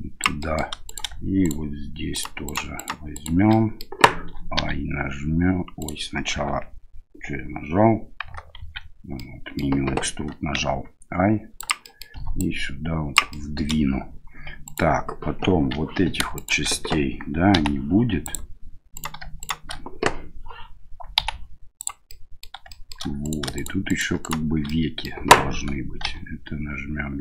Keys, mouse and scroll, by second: 0.4 middle click, 0.8 right click, 1.4 shift+right click, 2.1 shift+right click, 2.4 shift+right click, 2.7 shift+right click, 3.1 shift+right click, 3.5 middle click, 4.6 e, 8.6 ctrl+z, 9.1 middle click, 10.6 i, 11.8 click, 12.5 click, 13.3 middle click, 14.6 right click, 16.3 shift+right click, 18.9 right click, 19.4 shift+right click, 22.1 middle click, 22.7 shift+middle click, 22.8 shift+Delete, 23.2 right click, 23.5 shift+right click, 23.9 shift+right click, 24.2 shift+right click, 24.7 middle click, 26.0 e.